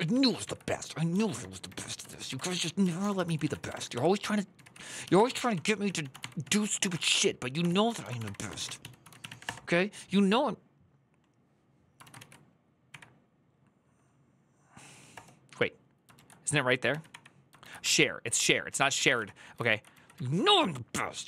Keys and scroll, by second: 0.9 ctrl+w, 0.9-9.5 typing, 11.7-13.1 typing, 14.6-15.4 typing, 16.0 ctrl+a, 16.7 ctrl+a, 16.9 Up, 17.4 ctrl+a, 18.5 Return, 18.8 :, 18.9 Up, 19.3 Left, 19.7 Left, 19.9 Right, 20.6-21.2 Right.